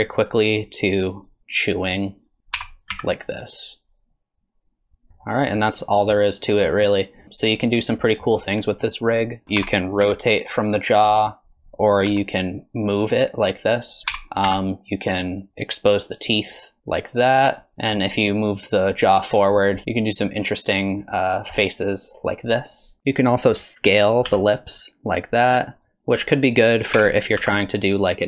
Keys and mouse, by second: 0.0 r, 0.6 click, 1.3 click, 2.5 r, 5.2 click, 6.2 click, 7.9 click, 9.4 alt+g, 9.4 alt+r, 9.4 a, 12.1 g, 14.1 r, 15.5 r, 17.7 middle click, 18.5-19.5 drag, 19.8 click, 20.6 click, 21.6-23.0 middle drag, 24.3 s, 27.0 r.